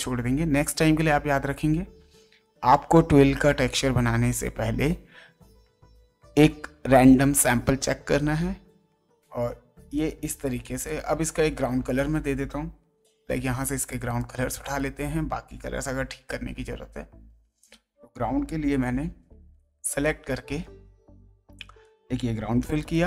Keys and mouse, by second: 7.4 ctrl+d, 9.5 space, 9.9 ctrl+right click, 10.8 ctrl+click, 11.5 ctrl+Tab, 12.9 g, 13.9 alt+click, 16.2 ctrl+Tab, 17.6 click, 18.8 m, 20.0 click, 22.5 g, 22.8 click.